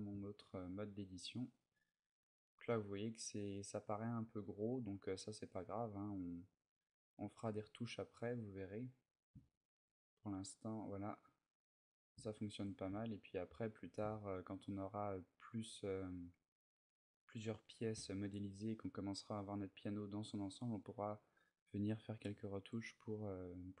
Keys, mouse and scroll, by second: 0.1 ctrl+middle click, 1.4 ctrl+middle click, 2.5 ctrl+middle click, 4.0 middle click, 7.4 click, 7.4 middle click, 8.9 middle click, 9.2 shift+middle click, 9.4 shift+middle click, 9.8 middle click, 12.1 shift+middle click, 12.8 ctrl+middle click, 13.8 shift+middle click, 16.2 middle click, 19.6 middle click, 23.5 middle click.